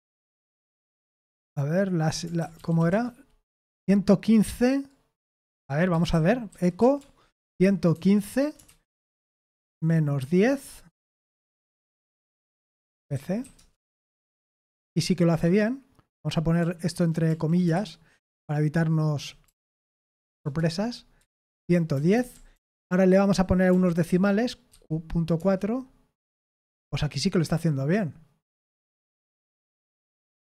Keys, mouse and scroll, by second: 1.4-2.7 typing, 2.9 Return, 5.6-14.9 typing, 14.4 ctrl+p, 14.9-15.8 Left, 16.6 Right, 17.2 Right, 17.7 shift+', 18.4 Right, 19.0 Right, 19.1 Right, 19.1 Right, 20.0 shift+', 20.4 Return, 21.4 ctrl+p, 21.9 BackSpace, 22.1 BackSpace, 22.3 BackSpace, 22.5 BackSpace, 23.2 Left, 23.7 Left, 24.0-25.8 typing, 30.0-30.4 typing.